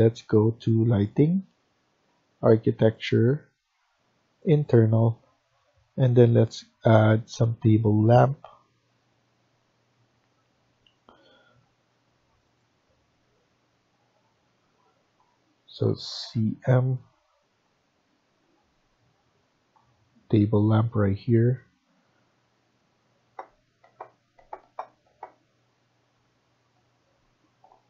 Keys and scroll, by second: 16.1-16.5 typing.